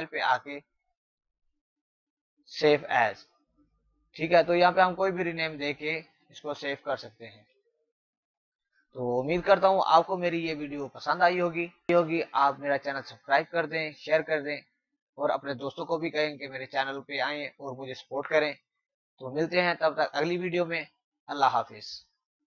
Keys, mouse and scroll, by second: 2.5 click, 6.1 click, 6.9-7.4 typing, 8.1 click.